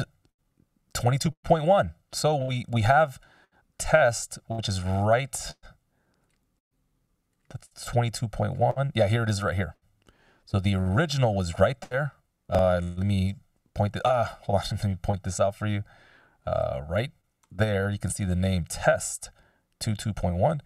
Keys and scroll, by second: 13.1 ctrl+alt+super+n, 14.7 super+z.